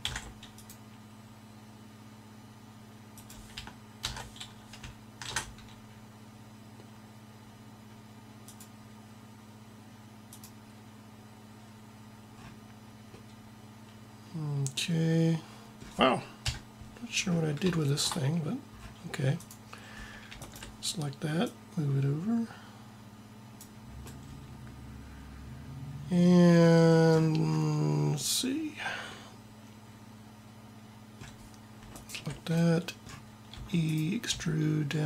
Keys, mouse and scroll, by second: 4.0 ctrl+z, 5.2 ctrl+r, 16.3 KP_7, 19.3-23.3 drag, 33.5 e, 34.2 s.